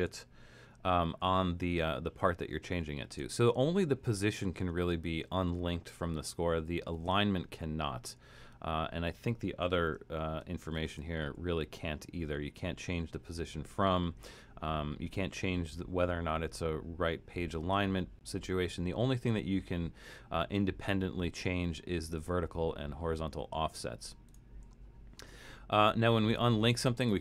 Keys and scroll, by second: 0.1 alt+super+., 11.0 shift+Return.